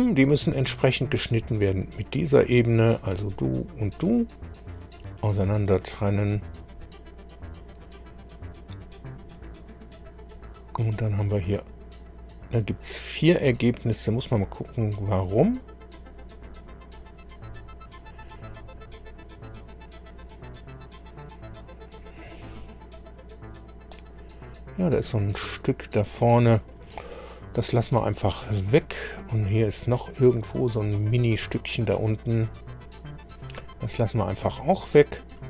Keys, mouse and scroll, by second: 3.6 ctrl+click, 5.0 click, 8.5 scroll down 2, 9.4 click, 11.0 scroll down 2, 12.3 click, 15.1 click, 17.0 click, 18.5-19.2 scroll up 2, 22.4 click, 25.5-26.9 middle drag, 28.4 click, 30.0-31.2 middle drag, 32.7-33.4 scroll up 2, 33.7-34.0 scroll down 2.